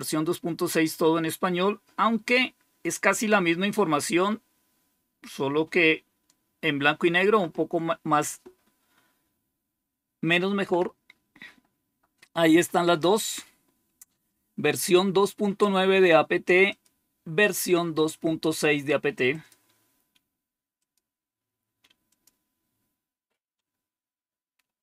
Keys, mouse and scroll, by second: 11.7 click, 16.6-20.2 drag, 20.7 click, 22.0-24.8 drag.